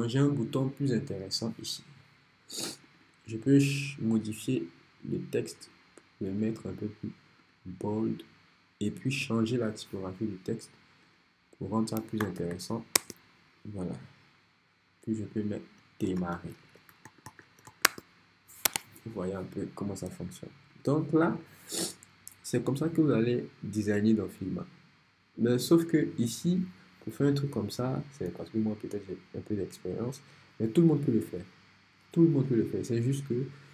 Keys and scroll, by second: 12.0-12.9 typing, 13.0 Return, 15.8-18.7 typing.